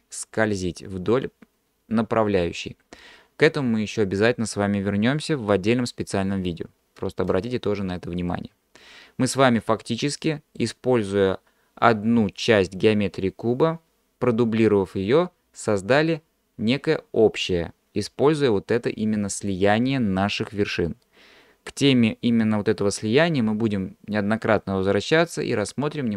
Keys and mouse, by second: 8.3-10.8 middle drag.